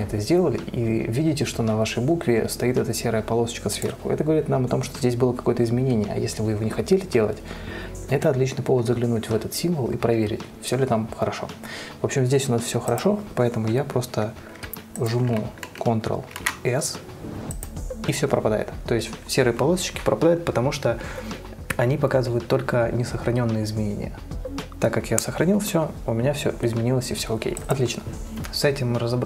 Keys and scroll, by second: 16.7 ctrl+s.